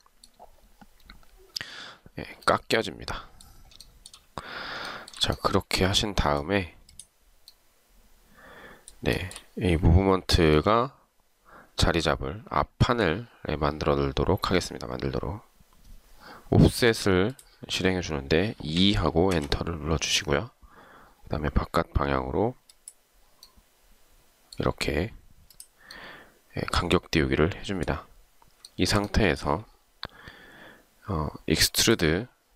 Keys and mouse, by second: 4.0 shift+right click, 5.0 shift+right click, 9.3 shift+right click, 18.9 2, 19.5 Return, 28.8 shift+right click.